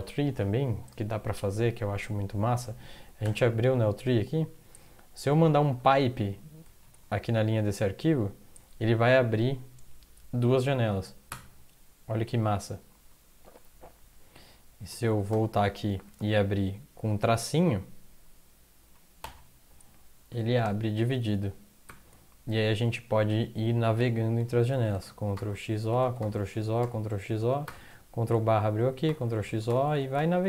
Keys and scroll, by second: 3.3 ctrl+\, 5.3 Right, 5.5 Right, 5.7 Right, 6.8 Left, 7.0 Left, 15.1 ctrl+x, 15.3 o, 15.9 Right, 16.1 Right, 19.2 -, 21.9 ctrl+\, 25.0 ctrl+x, 25.3 o, 26.0 ctrl+x, 26.2 o, 26.6 ctrl+x, 26.8 o, 27.6 ctrl+\, 28.7 ctrl+x, 29.1 o, 29.5 ctrl+x, 30.0 o, 30.2 ctrl+x.